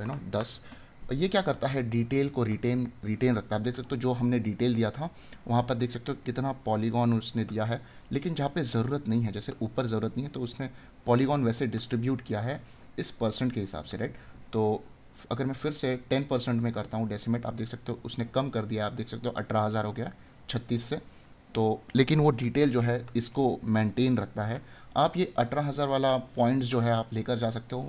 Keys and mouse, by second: 2.3 right click, 7.3 right click, 21.1 right click, 22.9 right click.